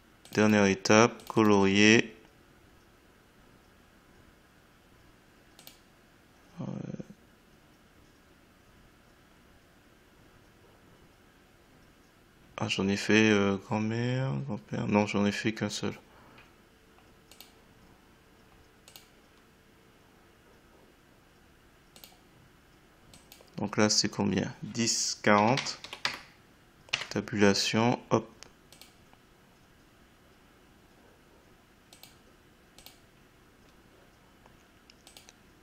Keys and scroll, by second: 25.3 1, 26.9 Tab.